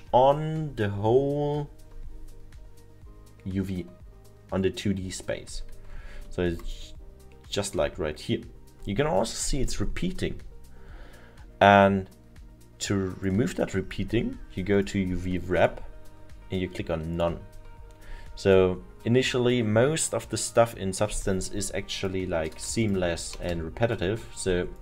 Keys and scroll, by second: 22.6 0, 23.5 Return.